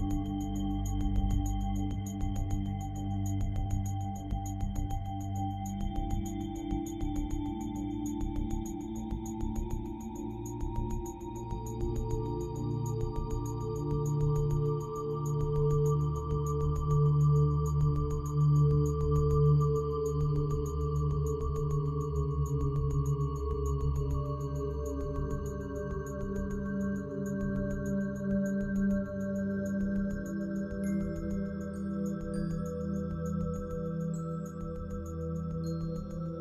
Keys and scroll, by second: 3.5-4.2 typing, 6.7 typing, 22.2 ctrl+z.